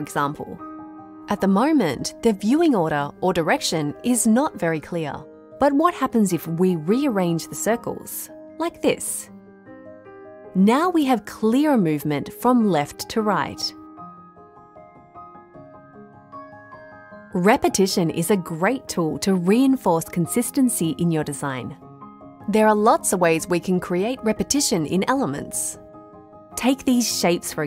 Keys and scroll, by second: 26.6 Delete.